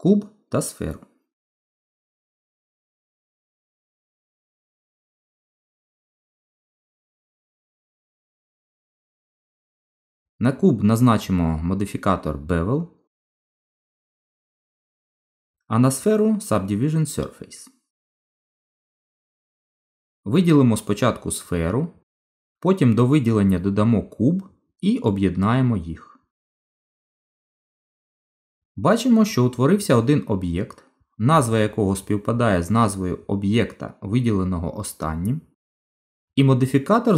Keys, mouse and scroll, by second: 0.9 shift+a, 2.5 middle click, 4.8 g, 6.6 middle click, 7.3 click, 10.2 click, 11.6 click, 13.8 middle click, 15.8 click, 16.8 click, 19.3 middle click, 24.2 shift+click, 26.1 right click.